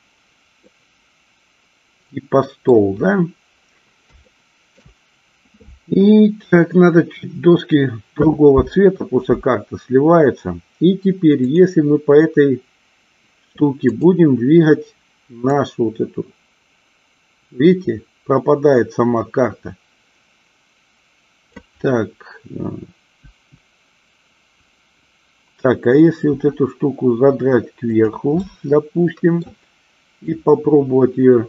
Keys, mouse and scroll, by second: 0.7-2.8 middle drag, 4.3-4.9 shift+middle drag, 11.4 click, 14.0 click, 15.6-21.7 drag, 23.3 KP_1, 26.4 r, 28.6-29.6 middle drag, 30.4-31.4 drag.